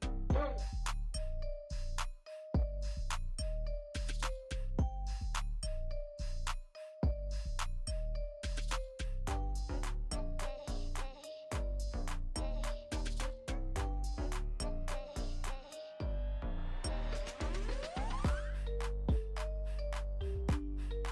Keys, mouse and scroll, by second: 0.1 space, 0.4 click, 0.6 space, 2.0-4.4 typing, 2.6 click, 3.0 click, 3.4 click, 3.9 click, 4.3 click, 5.7 click, 6.0 click, 6.1 space, 6.4 click, 8.0 space, 12.1 click, 12.8-13.1 typing, 12.9 click, 13.4-13.8 alt+scroll down 1, 16.2 Return, 18.4 click, 20.0-20.3 alt+scroll up 1, 21.0 click.